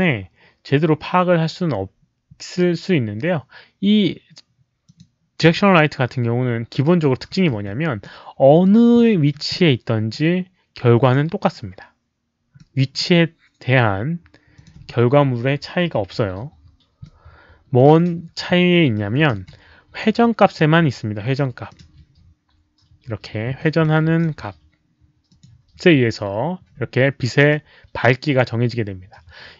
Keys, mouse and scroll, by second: 4.8 click, 5.4 w, 6.9-8.0 typing, 7.1 click, 8.0 middle click, 8.9 middle click, 9.4 middle click, 11.0 click, 12.5 middle click, 14.5 click, 14.7-15.5 typing, 15.0 middle click, 17.0-17.7 middle drag, 19.3 e, 19.9 click, 21.6 click, 23.5 e, 23.8 click, 25.2 click, 27.4 click.